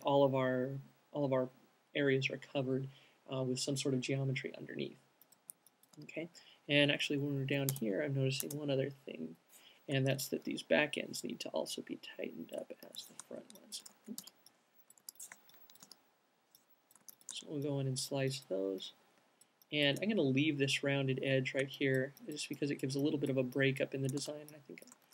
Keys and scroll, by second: 5.0 alt+q, 8.1 space, 8.7 space, 9.7 0, 13.2 alt+c, 14.3 super+z, 14.6-16.1 typing, 24.2-25.0 typing.